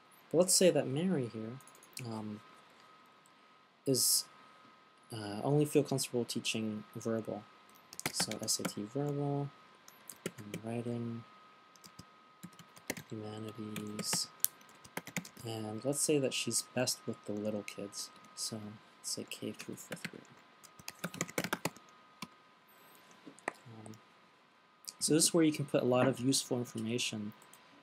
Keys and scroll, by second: 0.0-0.2 typing, 8.1-16.2 typing, 18.3-22.6 typing.